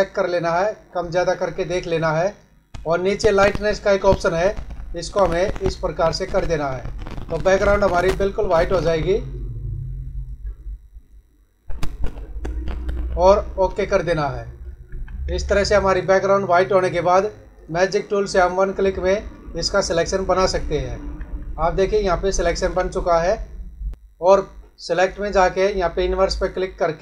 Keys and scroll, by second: 14.9 ctrl+-, 20.3 ctrl+=, 21.2 ctrl+-, 22.2 ctrl+=.